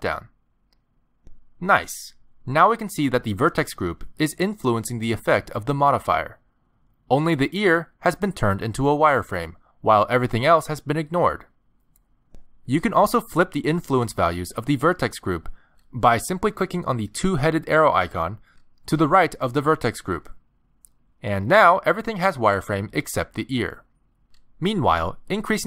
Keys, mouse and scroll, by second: 1.7 shift+middle click, 2.7-3.3 scroll up 2, 3.3 middle click, 8.3 middle click, 9.9-10.5 scroll down 1, 10.5-11.1 scroll down 1, 11.2 shift+middle click, 12.3 middle click, 19.3 click, 21.6 middle click, 25.3 middle click.